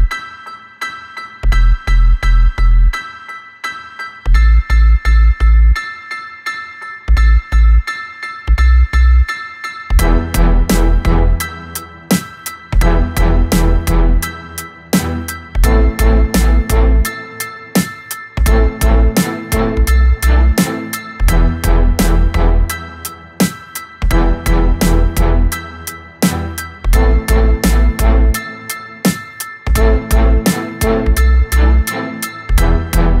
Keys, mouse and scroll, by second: 2.0 click, 3.9-5.2 drag, 5.2-6.6 scroll down 1, 6.6 click, 7.2-7.8 scroll down 1, 7.8-10.0 middle drag, 10.0 KP_1, 10.5 click, 11.2 click, 11.7 click, 13.8-16.9 drag, 17.3-20.4 drag, 22.5 s, 24.6-27.5 middle drag, 27.5 click, 28.6-33.2 drag.